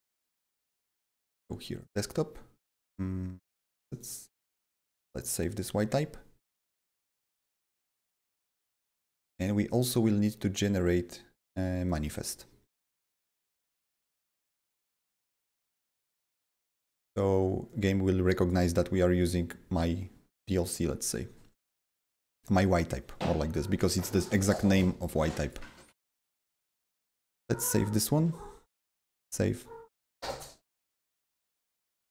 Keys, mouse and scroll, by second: 0.0 click, 0.4 click, 1.2 click, 3.3 click, 3.4 double click, 3.9 click, 5.0 click, 9.3 click, 9.4 click, 11.8 click, 13.8-14.7 scroll down 5, 17.6-27.0 drag, 27.0-28.9 drag, 28.9-32.1 drag.